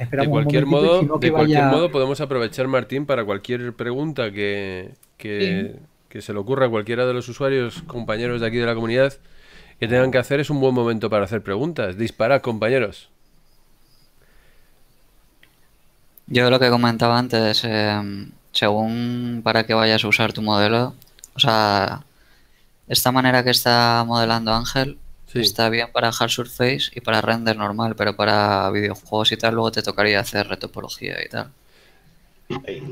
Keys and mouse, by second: 32.0 click.